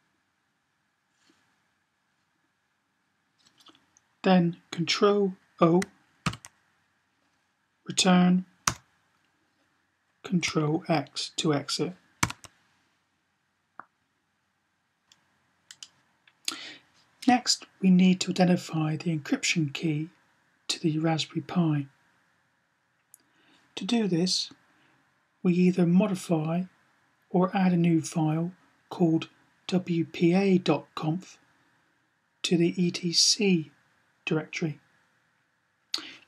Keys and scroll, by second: 6.2 ctrl+o, 11.9 ctrl+x.